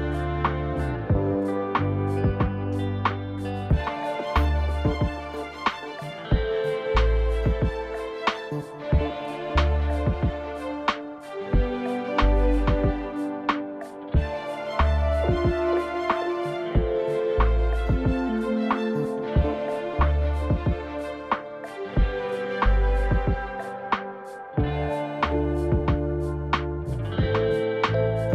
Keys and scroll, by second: 25.8 0.